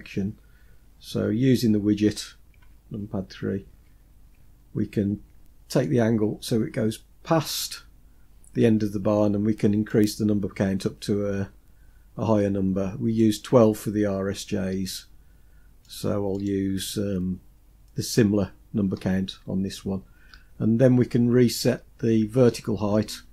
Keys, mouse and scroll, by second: 2.2 KP_3, 3.1-3.8 scroll up 3, 3.8 scroll up 1, 5.3-7.0 drag, 9.4-12.7 drag, 15.4 click, 15.9 click, 22.8-23.3 scroll down 2, 22.9-23.3 scroll up 1.